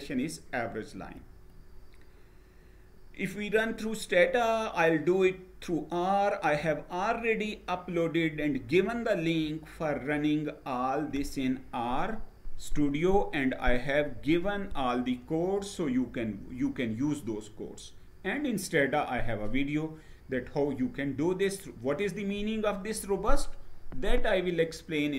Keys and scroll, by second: 0.6 Page_Down.